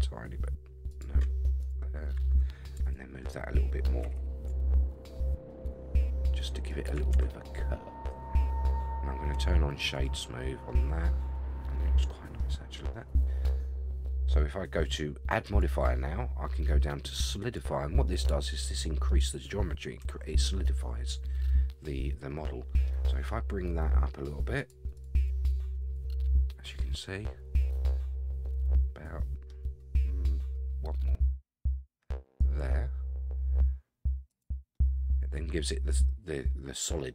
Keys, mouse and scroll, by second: 1.6 click, 2.8 shift+click, 4.0 g, 7.1 Tab, 7.5-8.6 middle drag, 9.3-10.0 right drag, 10.7-12.4 middle drag, 12.5-12.9 scroll up 2, 12.9-13.4 middle drag, 15.4-17.5 drag, 18.1-18.5 middle drag, 18.6-19.1 middle drag, 20.4-22.9 middle drag, 24.6 click, 24.9 click, 25.4 click, 26.9-29.5 middle drag, 32.4 click, 34.3 click, 34.7-37.1 middle drag.